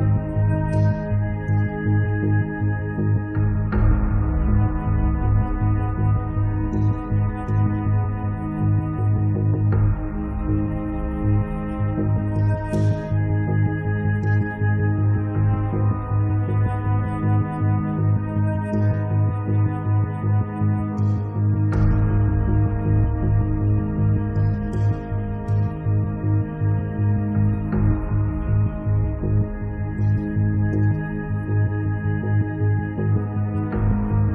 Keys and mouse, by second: 0.0-1.7 middle drag, 1.7-2.8 drag, 2.8 middle click, 3.8 middle click, 4.0-6.2 middle drag, 4.4-11.0 drag, 6.4 middle click, 10.9 right click, 11.1-12.8 middle drag, 12.9-15.3 drag, 15.5 click, 16.8 click, 16.8 right click, 17.2 right click, 17.5 right click, 18.2-25.1 drag, 23.8 middle click, 23.8 right click, 24.8-25.9 middle drag, 24.8 right click, 26.4-30.8 drag, 26.4 right click, 30.8 click, 31.7 middle click, 31.9 click, 32.3 middle click, 33.0-34.3 drag.